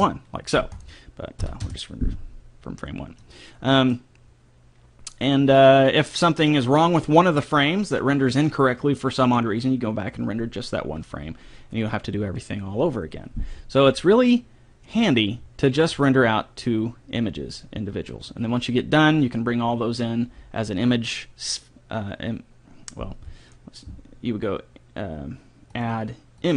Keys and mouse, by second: 0.8-2.6 drag, 3.3-6.0 middle drag, 25.7 click.